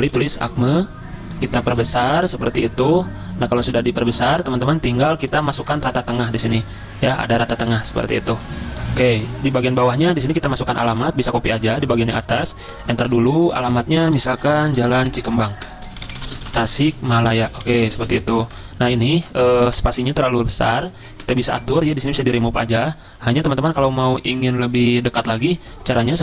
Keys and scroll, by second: 0.0-0.6 typing, 0.6 Return, 1.5 ctrl+], 1.6 ctrl+], 1.7 ctrl+], 1.8 ctrl+], 4.5-5.2 typing, 11.6 ctrl+c, 12.3 Return, 13.0 ctrl+v, 14.2-20.4 typing, 21.9-22.6 typing.